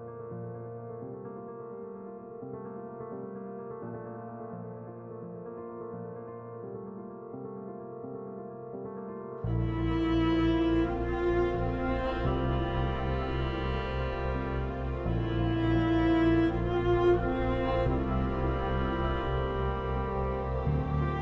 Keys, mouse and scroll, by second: 0.5 F2, 0.8-2.1 drag, 3.5 n, 3.7 End, 4.1 BackSpace, 4.4 ctrl+space, 4.8 F3, 5.4 F4, 5.9 F2, 6.3-7.6 drag, 7.6 alt+click, 8.6 F2, 8.7-11.0 drag, 11.0 F3, 11.3 Escape, 14.1-15.8 drag, 15.8 click, 16.3 ctrl+right click, 16.8-19.9 ctrl+drag, 20.8 t.